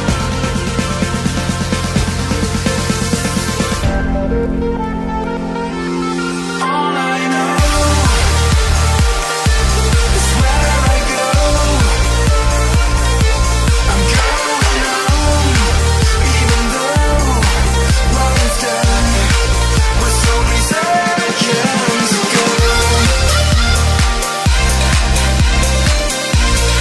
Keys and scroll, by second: 7.6 ctrl+b, 23.7 ctrl+j.